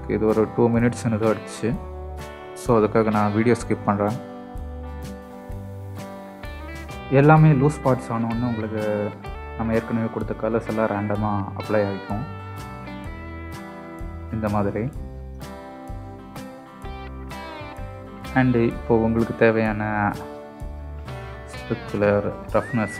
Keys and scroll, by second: 12.6 KP_0.